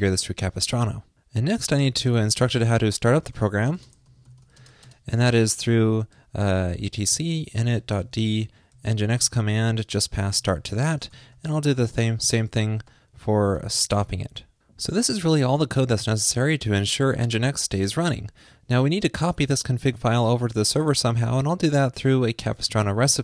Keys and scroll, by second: 11.0 ctrl+shift+d, 11.2 alt+shift+Left, 13.0 alt+Right, 13.2 alt+shift+Left, 14.3 super+s.